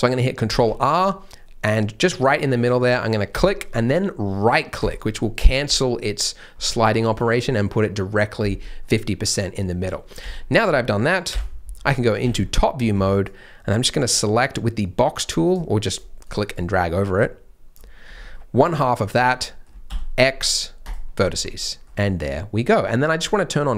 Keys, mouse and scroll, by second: 0.4 ctrl+r, 8.8 middle click, 9.5-10.2 scroll down 1, 10.2 z, 11.7 scroll down 1, 12.3 alt+a, 12.5 scroll up 1, 12.9 b, 15.9 click, 18.0 scroll up 1, 18.3 middle click, 19.8 x, 21.3 Tab, 21.6 middle click.